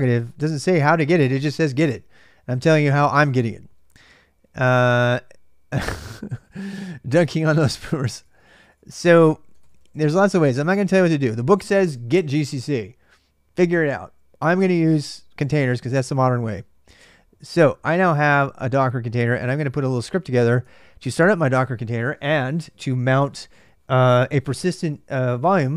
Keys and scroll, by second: 0.0-0.3 typing, 2.2-10.7 typing, 17.7-20.8 typing.